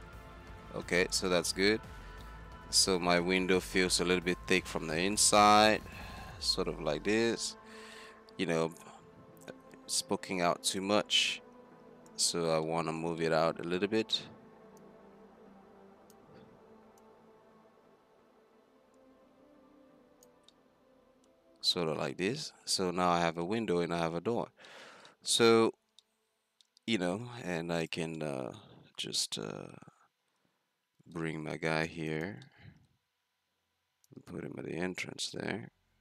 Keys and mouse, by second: 1.2-1.6 right drag, 1.6 z, 2.1-2.5 drag, 2.1 z, 2.8-5.3 middle drag, 11.0 z, 12.7 drag, 13.8-14.6 drag, 13.8 z, 14.8-17.0 drag, 20.6-22.6 middle drag, 22.9-23.5 middle drag, 23.9-26.3 middle drag, 26.4 middle click, 27.9-29.2 drag, 31.0 shift+d, 34.1-35.9 drag.